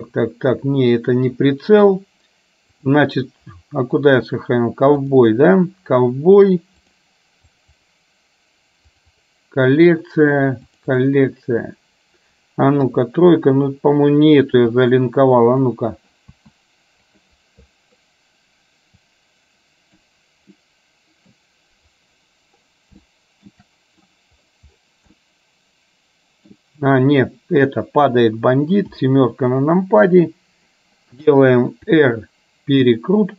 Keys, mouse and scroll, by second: 12.9 KP_3, 14.7 s, 16.5 s, 19.2-20.2 drag, 20.7 middle click, 23.2 shift+middle click, 25.2-26.5 middle drag, 28.9 KP_7, 31.9 r.